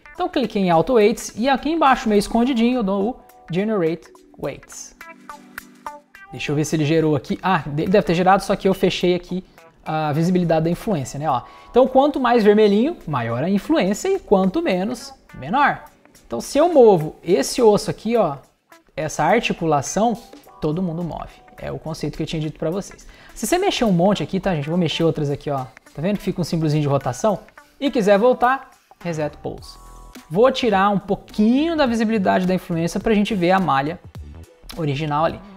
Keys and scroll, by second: 21.7 super+z.